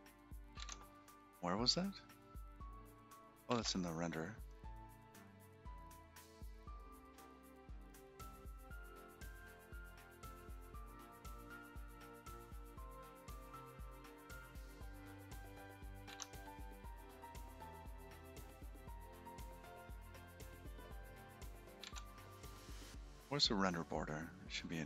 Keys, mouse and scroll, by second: 6.8-7.2 scroll up 10, 7.4 click, 9.7-11.4 scroll down 23, 11.8-12.5 scroll down 6, 12.9 scroll down 7, 14.9-15.9 scroll down 7, 15.9-16.6 scroll down 1, 16.6 scroll down 4, 23.5-24.1 scroll up 12, 24.5-24.8 scroll up 31.